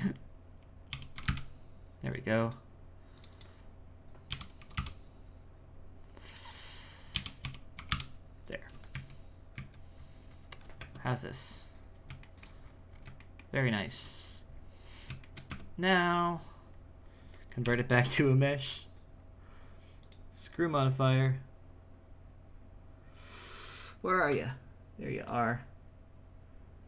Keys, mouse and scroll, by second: 3.3-8.9 drag, 8.9 z, 9.5 z, 10.0-10.8 scroll up 6, 10.8 Tab, 11.5-12.2 scroll down 6, 12.2 shift+middle click, 12.6-13.2 scroll up 7, 13.2-14.3 shift+middle drag, 14.3-15.2 scroll down 10, 15.2 shift+middle click, 15.5 Tab, 17.6 w, 20.0-23.1 drag.